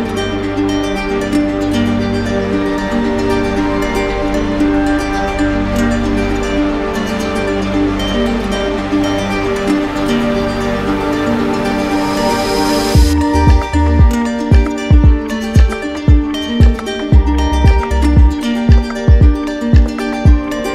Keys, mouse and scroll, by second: 0.5 right click, 1.7 click, 3.2 z, 5.7 click, 7.1 click, 9.8 right click, 12.0 right click, 13.1 click, 16.2 ctrl+click, 18.8 ctrl+click, 20.0 ctrl+w.